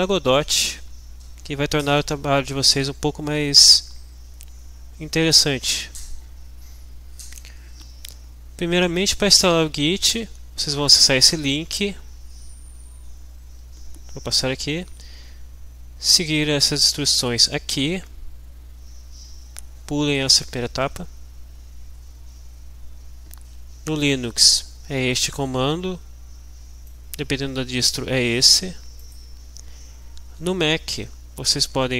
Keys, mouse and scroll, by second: 12.3-13.2 scroll down 1, 13.5-14.1 scroll down 1, 14.6-15.0 scroll down 2, 15.2 scroll down 2, 16.1-17.2 scroll down 2, 17.5 scroll down 2, 19.1 scroll up 2, 20.7-21.2 scroll down 2, 21.3 scroll down 2, 22.8 scroll down 1, 24.0-25.5 drag, 26.9-28.7 drag, 29.1 click, 29.8-30.2 scroll down 1, 31.5 scroll down 1.